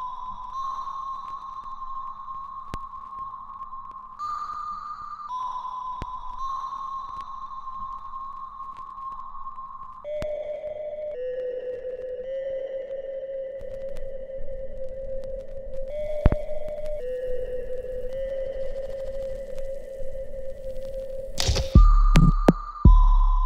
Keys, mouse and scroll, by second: 1.7 alt+middle click, 2.2-3.5 alt+drag, 3.5 alt+right click, 4.0 alt+click, 4.6 alt+middle click, 5.0 alt+right click, 6.1 ctrl+s, 7.4 click, 12.7 click, 15.4 click, 16.1 alt+middle click, 16.5 alt+right click, 17.7 ctrl+s, 18.4 right click, 19.6 click, 21.5-23.4 ctrl+right drag.